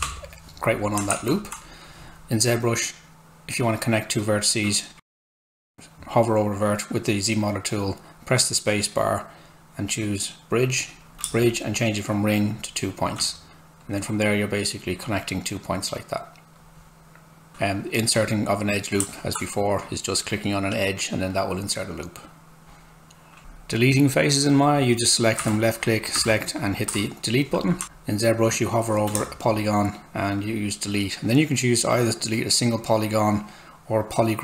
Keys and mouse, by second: 1.5 Tab, 5.0 space, 10.6 click, 10.8 space, 11.1 z, 11.2 space, 12.5 click, 12.6 space, 13.8 click, 17.5 Tab, 19.8 click, 25.4 Delete, 25.8 click, 26.1 Delete, 26.6 click, 26.9 Delete, 29.1 space, 31.2 space.